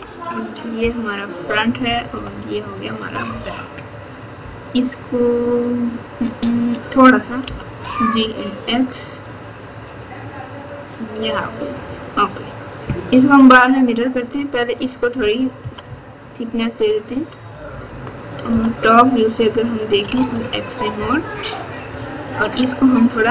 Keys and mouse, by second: 2.1 KP_9, 3.2 KP_8, 7.4 g, 13.8 click, 15.6 KP_6, 15.8 KP_6, 16.0 KP_6, 16.1 KP_6, 17.5 KP_4, 17.7 KP_4, 17.8 KP_4, 18.4 KP_7, 20.1 alt+z.